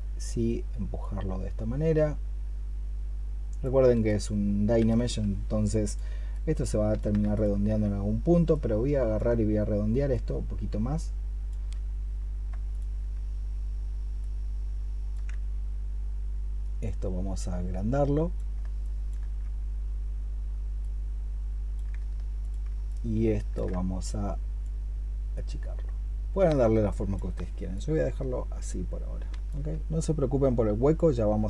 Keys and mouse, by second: 7.2 ctrl+click, 12.5 ctrl+click, 13.4 ctrl+click, 18.7 alt+click, 22.2 ctrl+click.